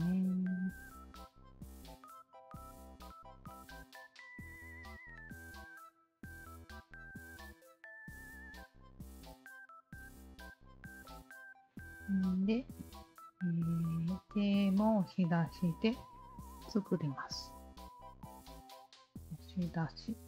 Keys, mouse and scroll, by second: 0.0 alt+click, 1.4 alt+click, 2.4 alt+click, 3.5 alt+middle click, 3.9 click, 3.9 alt+right click, 4.8 Tab, 5.4 click, 5.8-8.0 alt+drag, 9.2 alt+click, 9.8-10.6 alt+drag, 11.0 alt+click, 11.7 alt+click, 12.4-13.5 alt+drag, 14.5 alt+middle click, 14.9 alt+right click, 15.9 3, 16.5 alt+click, 17.4 alt+click, 18.7 shift+q, 19.8 alt+click.